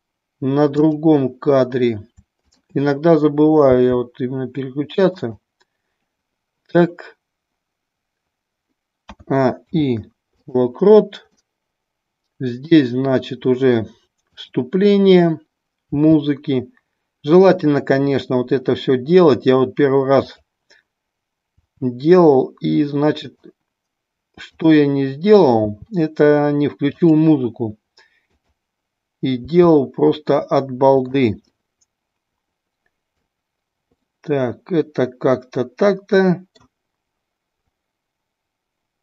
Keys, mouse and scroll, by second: 0.8-1.6 drag, 2.5-3.0 drag, 5.4 click, 11.4-12.7 middle drag, 17.6 click, 20.1-21.1 drag, 21.6 r, 24.5-25.6 drag, 27.1 click, 27.1 r, 28.2-28.9 drag, 29.5 r, 31.1 drag, 31.5-33.4 middle drag, 34.1-36.8 middle drag.